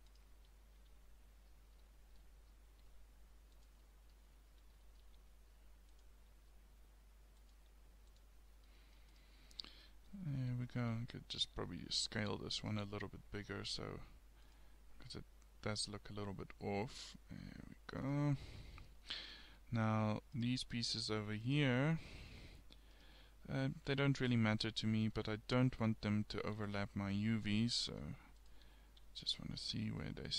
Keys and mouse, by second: 0.7 a, 2.9 g, 5.2 g, 6.3 s, 7.6 g, 9.2-11.0 drag, 11.0 a, 11.2 a, 11.6 s, 12.8 g, 15.0 g, 18.6-20.3 middle drag, 20.4 middle click, 22.0 middle click, 26.6 a, 28.5 click, 28.7 a, 29.1 a, 29.7-30.3 drag.